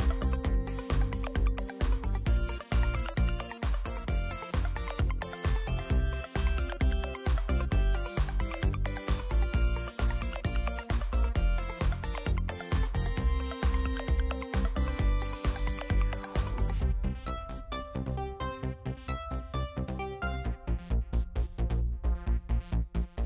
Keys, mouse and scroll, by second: 2.9 click, 4.9 click, 6.6 click, 10.4 click, 20.8 click.